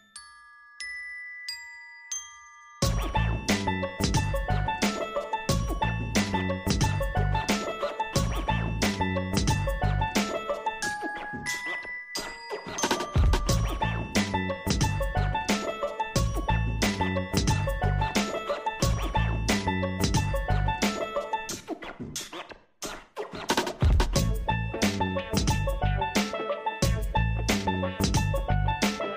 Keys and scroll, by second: 27.8 ctrl+shift+].